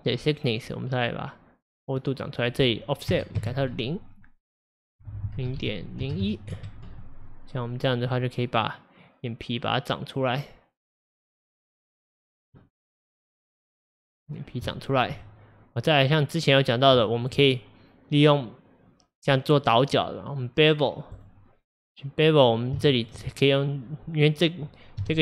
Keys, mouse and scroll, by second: 1.1-7.3 drag, 7.3-7.7 middle drag, 7.7-8.2 scroll up 2, 8.2-10.2 middle drag, 10.2-12.8 drag, 12.8-14.4 middle drag, 14.4-14.7 scroll down 2, 14.7-17.5 shift+middle drag, 17.5-20.0 scroll up 2, 20.0-22.0 drag, 22.0-25.1 middle drag, 25.1 KP_Divide.